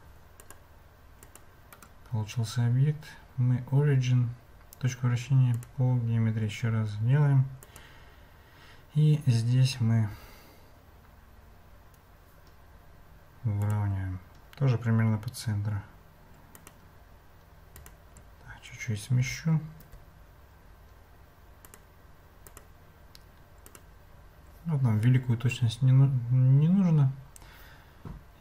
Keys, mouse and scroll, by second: 0.4 click, 1.2 click, 1.7-5.7 drag, 7.6 click, 10.1 g, 16.6 click, 17.8 click, 19.2 g, 22.4 click, 23.6 click.